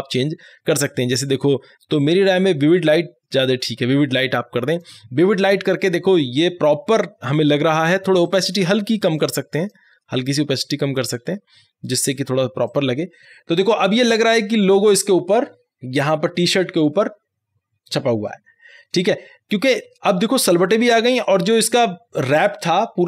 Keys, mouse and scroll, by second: 4.8 click, 8.3-12.7 drag.